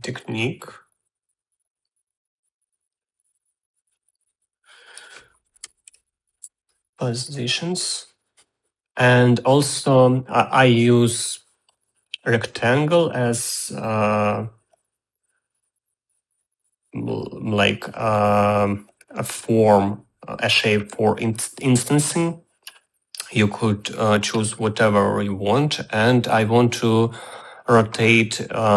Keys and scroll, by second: 6.1-7.0 typing, 7.3 Return.